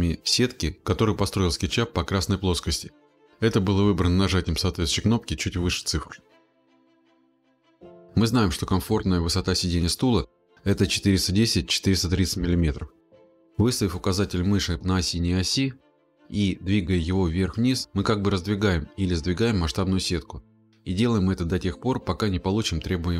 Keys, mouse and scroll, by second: 1.6-3.7 drag, 19.5-22.2 drag.